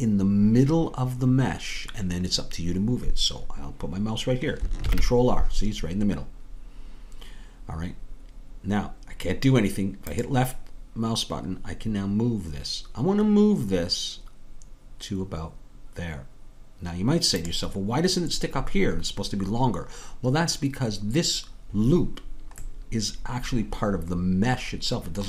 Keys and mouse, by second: 4.9 ctrl+r, 22.6-25.2 middle drag.